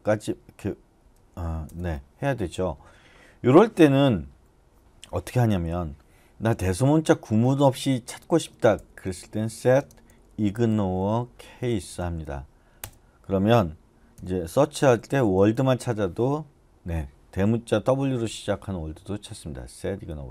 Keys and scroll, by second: 0.0-1.7 typing, 8.5-12.8 typing, 12.8 Return, 13.9-16.0 typing.